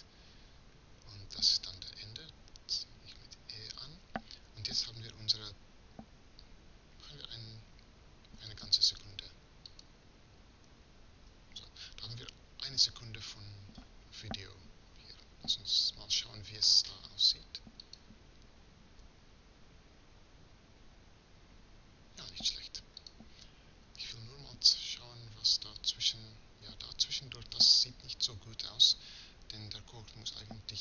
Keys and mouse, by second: 2.4 e, 11.0 e.